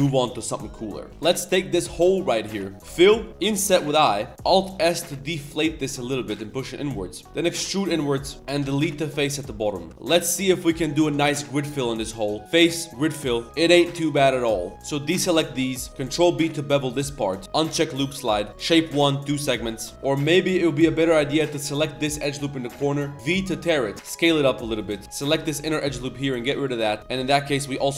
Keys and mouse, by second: 0.3-1.1 middle drag, 1.1 1, 1.1 shift+s, 1.5 middle click, 2.3 middle click, 2.5 shift+middle drag, 2.7 ctrl+z, 2.9 f, 3.1 middle click, 3.4 i, 4.3 z, 6.9 click, 9.9 ctrl+s, 9.9 click, 9.9 z, 9.9 a, 10.6 middle drag, 12.4-13.0 drag, 13.5 drag, 13.9 z, 14.0-14.3 drag, 14.4 z, 14.5 middle click, 14.7 c, 15.9 z, 15.9 ctrl+b, 17.7-18.7 drag, 19.5 middle click, 19.6 z, 19.9 shift+click, 19.9 shift+1, 20.5 middle click, 20.7 z, 21.1 z, 21.5 middle click, 22.1 click, 22.2 middle click, 22.4 middle click, 22.8 click, 22.9 middle click, 23.9 shift+s, 25.0 ctrl+z, 25.0-27.0 typing, 25.1 alt+shift+click.